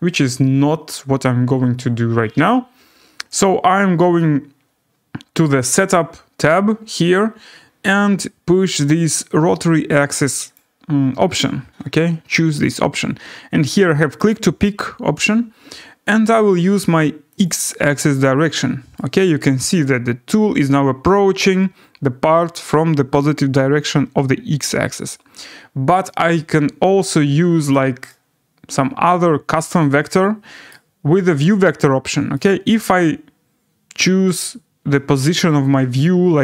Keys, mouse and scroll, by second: 5.8 click, 10.5 click, 14.3 click, 17.4 click, 18.9 right click, 19.2 scroll down 3, 19.5 scroll, 21.0 scroll, 21.0 scroll down 2, 24.1 scroll, 27.7 click, 28.7 right click, 29.1-32.6 middle click, 29.7-30.3 scroll, 30.7 right click, 32.7 right click, 33.0 middle click, 35.0-35.3 scroll.